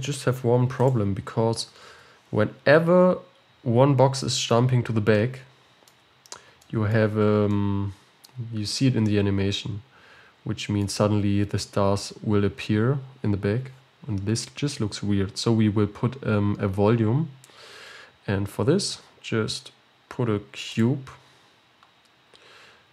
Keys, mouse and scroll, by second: 0.8-1.2 drag, 2.0 ctrl+s, 2.5-4.3 scroll down 10, 4.3-6.2 shift+middle drag, 6.2-6.7 scroll up 3, 6.7-10.9 shift+middle drag, 15.2 KP_7, 21.3 shift+a.